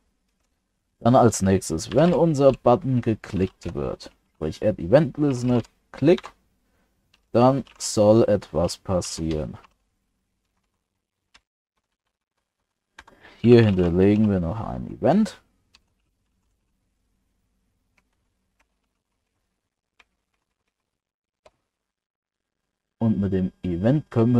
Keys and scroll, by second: 9.7 ctrl+alt+7, 18.1 ctrl+Left, 19.3 ctrl+Right, 20.1 ctrl+Right.